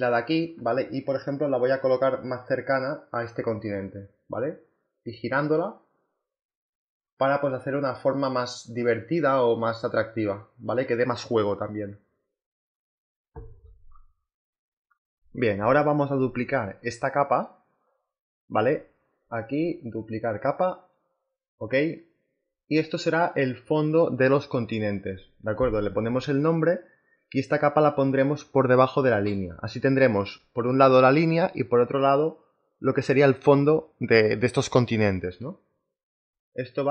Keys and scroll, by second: 0.8 v, 3.8 ctrl+t, 25.3 b, 25.7 c, 26.5 k, 27.9-28.9 typing, 30.2 space, 30.5 c, 32.7 BackSpace, 32.9 e, 33.4 t.